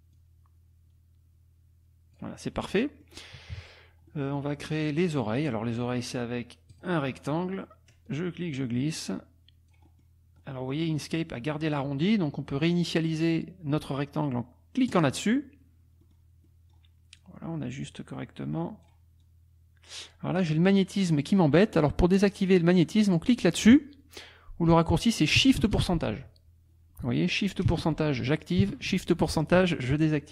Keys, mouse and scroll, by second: 0.1-2.3 drag, 2.7 click, 3.5 KP_Subtract, 4.1-4.6 drag, 6.7 click, 8.0-10.2 drag, 10.4 click, 14.9 click, 16.0 click, 19.2 click.